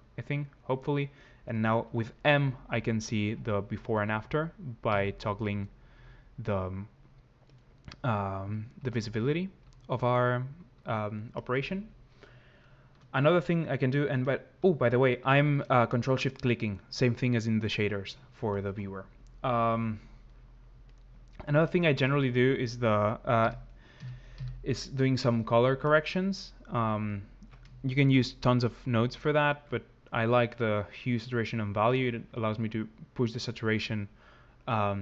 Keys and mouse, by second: 2.2-5.7 typing, 8.6-10.8 typing, 16.4 click, 20.6 click, 25.6 click, 31.8 click.